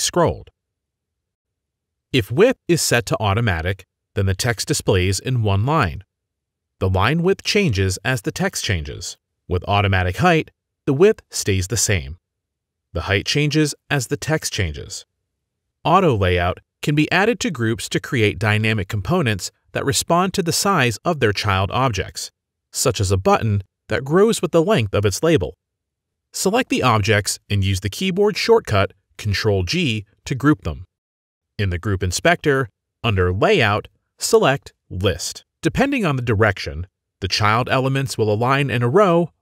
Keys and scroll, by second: 5.2 ctrl+a, 5.5 ctrl+c, 6.0 ctrl+v, 6.4 ctrl+v, 6.9 ctrl+v, 7.8 ctrl+z, 8.5 ctrl+z, 10.5 ctrl+a, 11.2 ctrl+c, 11.6 ctrl+v, 12.6 ctrl+v, 13.0 ctrl+v, 13.4 ctrl+v, 13.9 ctrl+v, 14.7 ctrl+v, 15.1 ctrl+v, 15.5 ctrl+a, 16.0 ctrl+c, 16.9 ctrl+v, 18.2 ctrl+v, 19.8 ctrl+v, 21.1 ctrl+v, 23.4 ctrl+z, 24.4 ctrl+z, 29.3 ctrl+g.